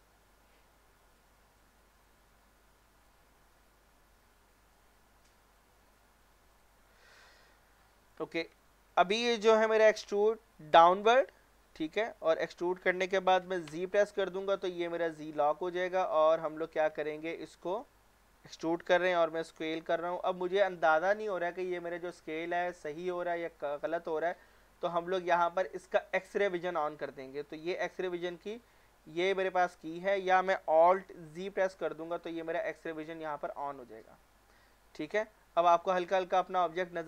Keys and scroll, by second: 3.3 a, 9.8 e, 13.7 z, 19.8 s, 22.7 Escape, 31.3 alt+z.